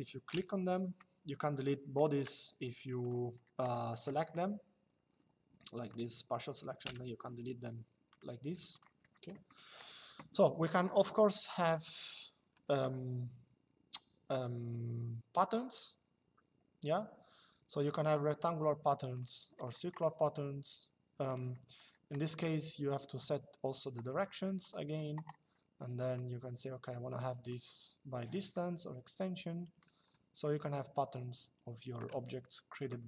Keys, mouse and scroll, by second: 1.7 click, 4.0 click, 7.8 click, 9.0 middle click, 11.9 click, 17.6 click, 18.9 click, 21.0 click, 24.3 click, 25.8 click, 28.2 click, 30.1 shift+middle click.